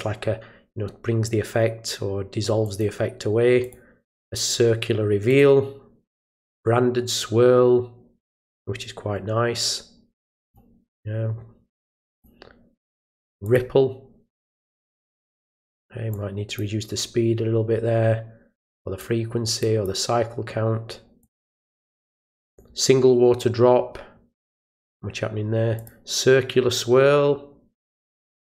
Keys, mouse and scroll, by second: 2.6 click, 3.6 click, 5.3 click, 6.3 click, 10.2 drag, 12.1 click, 13.4 click, 16.1-16.5 drag, 18.7 click, 19.6 click, 21.2 click, 22.4 click, 24.4 click, 25.7 click.